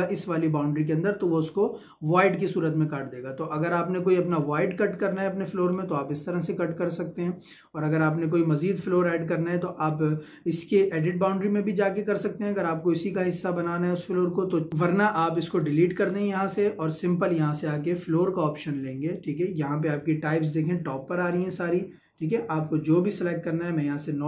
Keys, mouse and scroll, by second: 4.1 click, 5.2 scroll up 1, 5.4 middle click, 9.9 click, 14.2 Escape, 14.8 click, 15.7 Delete, 16.7 click, 17.9 Escape, 19.1 click, 21.3-23.1 scroll up 1, 23.8 click.